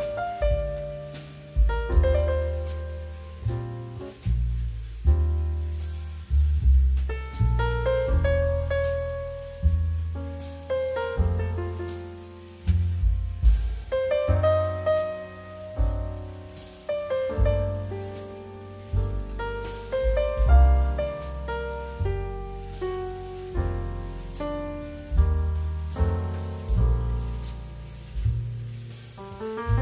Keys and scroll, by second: 0.6 z, 2.2-2.8 typing, 3.1 Tab, 4.0 KP_2, 5.5 Delete, 8.9 z, 10.0 space, 10.8 space, 11.5 z, 14.0 KP_1, 15.4 space, 17.8 space, 18.9 space, 19.7 space, 20.5 m, 21.4 space, 22.8 n, 24.9 n, 26.1 space, 27.1 space, 28.7 space, 29.3 z.